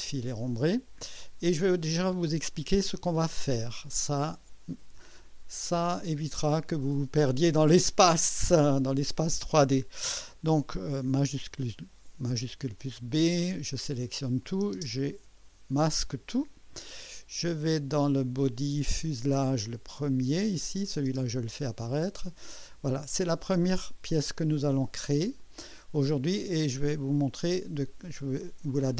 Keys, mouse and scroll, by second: 0.8 scroll down 2, 1.6 right click, 2.8 right click, 3.5 typing, 11.4 shift+b, 12.9-14.4 drag, 14.8 space, 16.3 click, 18.8 click, 19.9 click, 20.8 click, 21.1 space, 22.2 click, 22.9-23.8 drag, 23.9 scroll up 1, 24.3 scroll down 1, 24.8 click, 25.8 click, 27.0 scroll up 1, 27.6-28.2 right drag.